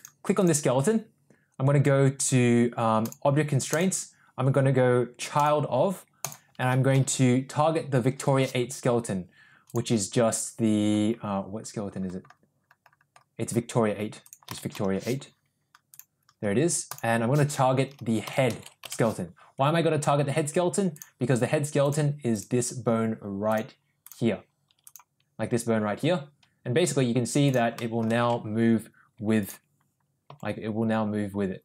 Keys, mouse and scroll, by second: 0.0 click, 0.4 click, 3.0 click, 3.7-5.7 drag, 6.3-9.7 drag, 14.2-16.2 drag, 16.9-19.3 drag, 20.9 drag, 23.5-24.3 drag, 25.1 click, 26.1 r, 27.8 middle drag, 28.6 ctrl+z, 30.4 g.